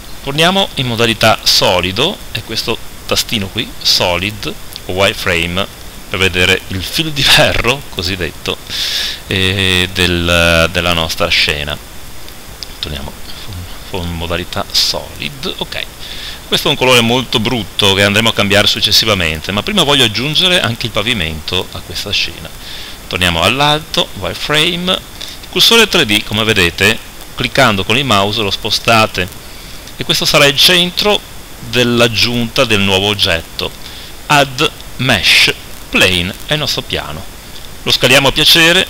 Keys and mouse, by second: 0.7 z, 2.5-4.0 drag, 10.9 middle click, 12.9-16.5 drag, 22.9-24.8 middle drag, 22.9 KP_7, 24.1 z, 24.8-36.5 drag, 36.5 middle click, 37.1-38.8 drag.